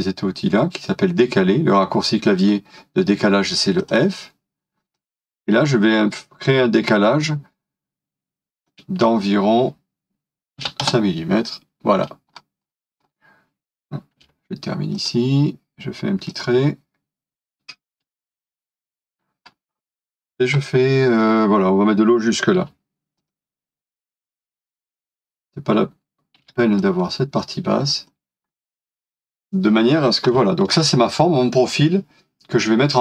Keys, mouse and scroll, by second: 10.6 typing, 10.8 Return, 12.4 scroll up 1, 17.4-17.9 typing, 19.1 scroll down 1, 22.3-23.1 typing, 26.4 typing, 28.5 scroll down 1, 29.3 typing, 29.9 scroll down 1, 30.3 middle click.